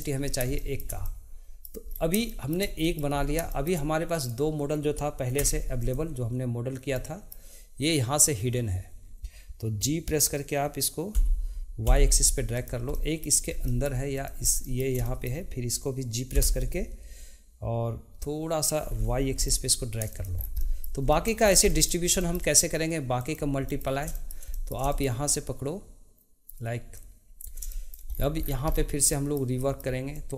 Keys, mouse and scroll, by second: 0.5-1.8 shift+middle drag, 2.2 shift+middle click, 4.2 click, 5.3 Tab, 5.8 click, 7.0-10.1 middle drag, 11.1 g, 13.7 shift+middle click, 14.1 click, 14.4 scroll down 1, 14.6-16.3 middle drag, 16.3 g, 20.6 middle click, 23.2 click, 23.6-26.9 middle drag, 26.9 click, 27.7 shift+middle click, 28.2-28.5 scroll down 2, 29.1-30.1 shift+middle drag, 30.1-30.3 drag.